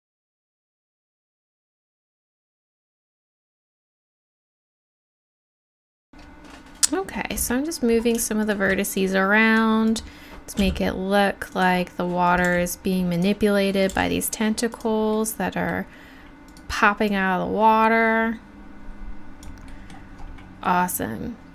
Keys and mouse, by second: 0.0-0.8 typing, 1.0 right click, 1.5 middle click, 2.1-6.0 typing, 2.2 right click, 2.8 click, 3.3 middle click, 3.8 click, 4.7 click, 5.4 click, 6.1 click, 7.3 click, 8.0 click, 9.1 click, 10.6 g, 12.5 g, 14.7 g, 15.3 middle click, 15.7 click, 17.1-19.4 drag.